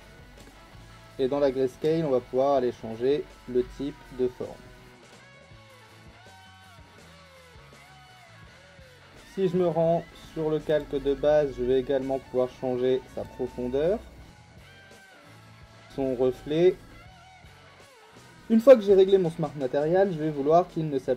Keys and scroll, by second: 7.5 ctrl+z.